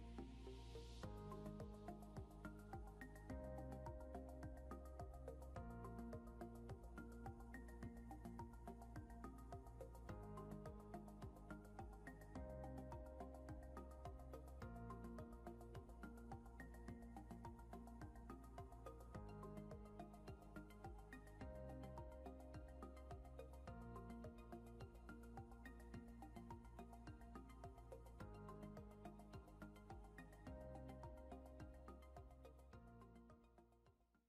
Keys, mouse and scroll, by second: 1.7 scroll up 1, 1.9 scroll down 1, 7.5 ctrl+s, 11.4 scroll up 1, 18.2 scroll up 1, 19.8 scroll down 1, 21.1 scroll down 1, 32.3 F4.